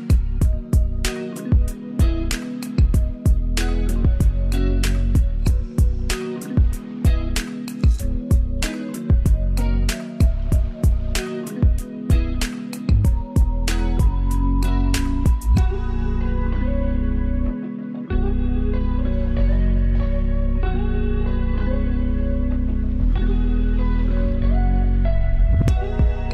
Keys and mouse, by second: 1.7 ctrl+space, 2.1 ctrl+alt+click, 3.1 Return, 3.6 Left, 4.1 Up, 4.7 Down, 5.5 Up, 6.7 ctrl+space, 7.0 ctrl+alt+click, 11.1 ctrl+space, 11.4 ctrl+click, 11.9 ctrl+space, 12.6 ctrl+space, 16.7-18.1 ctrl+alt+drag, 19.6 ctrl+space, 20.5 ctrl+click, 20.6 ctrl+space, 20.9 ctrl+space, 22.3 click, 22.9 ctrl+z, 25.2 Up, 25.8 Down.